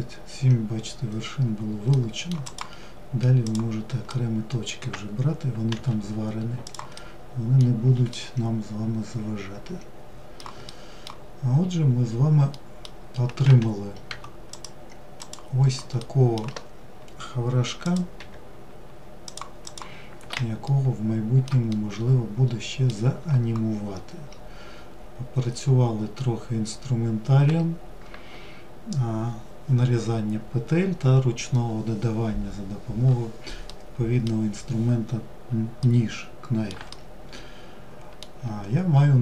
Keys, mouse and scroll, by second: 1.1-1.6 middle drag, 1.6 click, 2.6 click, 3.3-4.9 middle drag, 4.9 g, 6.2-10.4 middle drag, 10.4-11.7 scroll down 3, 11.7-12.7 middle drag, 12.7 1, 13.7 click, 14.4 click, 15.2-17.0 middle drag, 17.0 click, 18.8 click, 19.8-23.1 shift+middle drag, 23.1-25.1 scroll up 3, 25.1-25.9 scroll up 1, 25.9-28.2 scroll up 1, 32.8-39.2 middle drag.